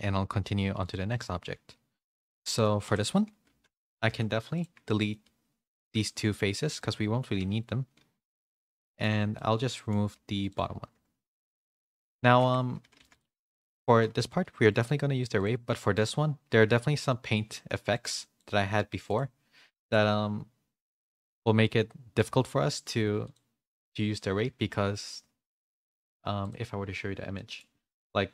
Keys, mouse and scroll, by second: 2.0 shift+middle click, 2.3 middle click, 4.1 Tab, 4.1 /, 4.3 3, 4.5 click, 4.8 middle click, 5.7 shift+click, 6.0 x, 7.3 Tab, 8.2 /, 8.8 middle click, 9.1 Tab, 9.3 middle click, 10.1 2, 10.8 ctrl+e, 11.8 middle click, 12.4 Tab, 12.8 a, 13.3 middle click, 13.3 a, 14.2 g, 15.3 click, 15.6 middle click, 17.9 click, 19.0 click, 19.9-22.4 drag, 23.3-26.5 drag, 27.4 middle click.